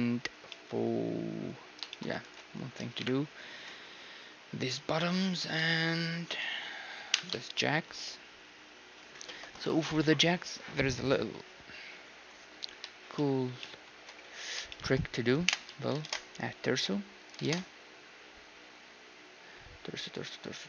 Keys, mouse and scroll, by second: 0.3 z, 2.2 ctrl+s, 3.0 KP_1, 3.3 z, 6.0-8.0 drag, 6.4-10.0 middle drag, 7.2 KP_1, 13.2-17.2 middle drag, 15.5 KP_3, 15.8 z, 16.0 shift+a, 17.2-19.3 drag, 17.5 shift+a.